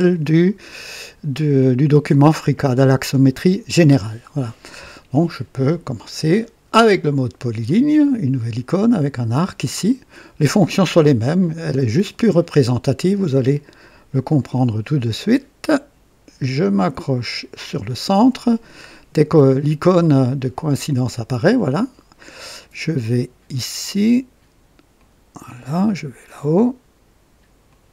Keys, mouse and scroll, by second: 4.1 scroll up 1, 4.8 scroll up 1, 5.1-5.7 right drag, 14.2 click, 21.5 click, 24.9 click, 27.6 click.